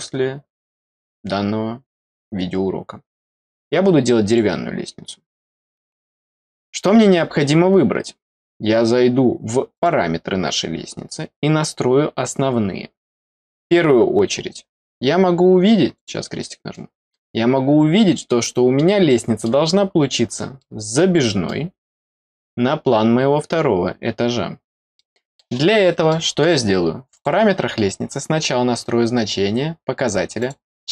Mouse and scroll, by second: 4.2 click, 5.6 click, 5.7 click, 9.7 click, 15.9 click, 16.6 middle click, 17.1-17.8 scroll down 2, 18.1 middle click, 19.0 middle click, 19.8 scroll up 1, 20.5 middle click, 21.2 middle click, 21.7 scroll up 2, 24.9 middle click, 26.0 middle click, 27.1 click, 30.3 click, 30.7 click.